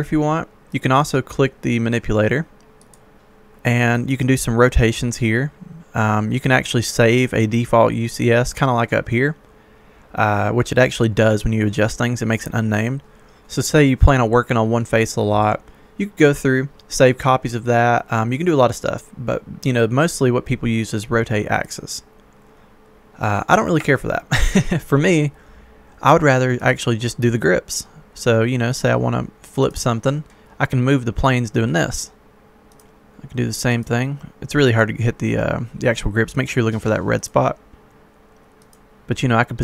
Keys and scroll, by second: 23.9 Escape.